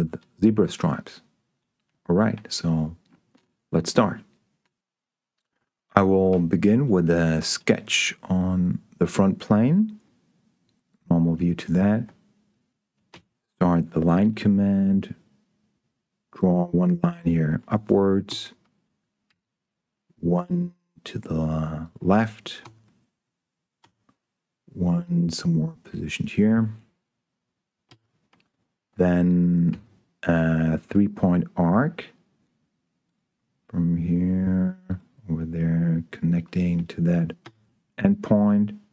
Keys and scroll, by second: 6.2 s, 13.5 l, 18.7 Escape, 19.2 l, 22.9 Escape, 23.8 l, 28.2 Escape, 29.6 s, 37.8 Escape.